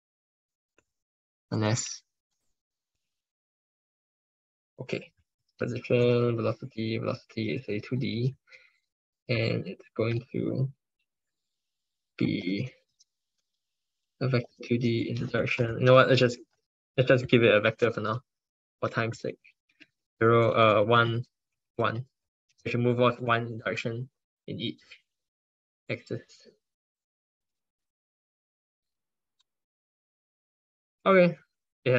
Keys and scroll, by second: 5.3 ctrl+Left, 5.5 ctrl+Left, 6.1 ctrl+Right, 12.2 ctrl+Right, 12.4 ctrl+Right, 12.7 ctrl+Left, 13.2 ctrl+Left, 14.6 ctrl+Right, 16.8 ctrl+BackSpace.